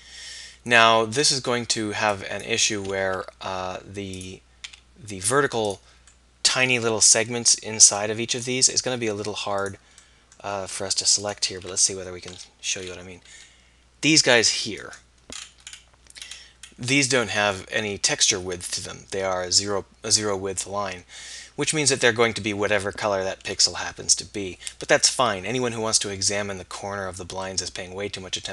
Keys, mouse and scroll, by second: 3.0 g, 4.7 s, 11.3-12.5 middle drag, 14.9 click, 16.3-21.1 middle drag, 27.6-28.5 middle drag.